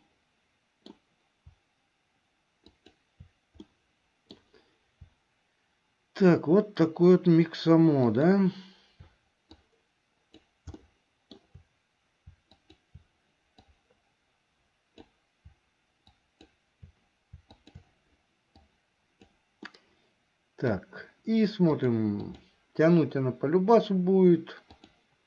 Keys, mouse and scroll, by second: 0.1-1.1 middle drag, 3.8 middle click, 8.2 shift+click, 9.8 click, 11.1 shift+middle click, 12.6 shift+click, 13.8-15.3 drag, 17.6 shift+click, 18.8 click, 19.8-21.0 middle drag, 21.7 click, 24.7-25.2 drag.